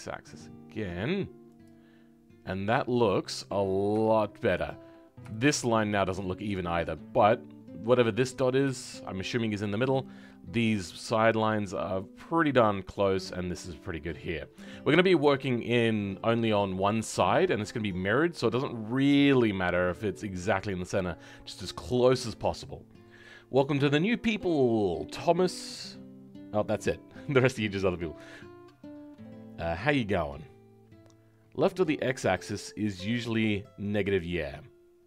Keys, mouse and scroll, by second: 4.0 shift+middle click, 4.6-5.2 scroll up 1, 5.2-8.3 shift+middle drag, 8.3-8.7 scroll down 1, 8.7-13.6 shift+middle drag.